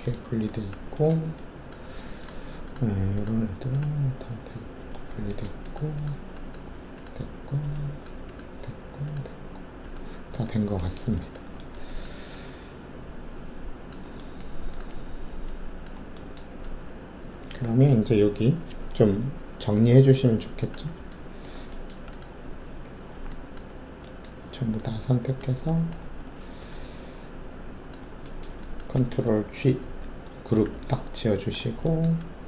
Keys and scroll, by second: 29.8 ctrl+alt+g.